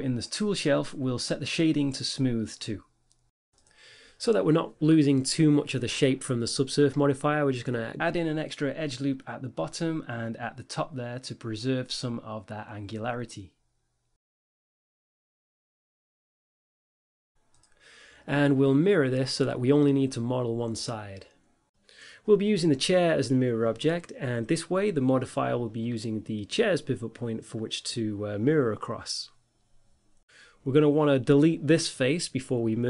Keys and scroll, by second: 5.4 Tab, 6.2 ctrl+r, 7.4 a, 7.5 Tab, 8.3 a, 10.2 Tab, 12.4 g, 14.8 ctrl+r, 18.4 Tab, 29.2 Tab.